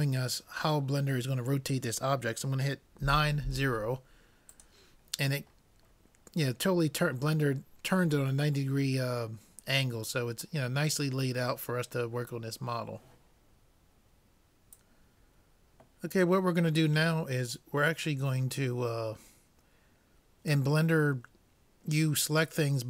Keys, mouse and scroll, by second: 5.4 middle click.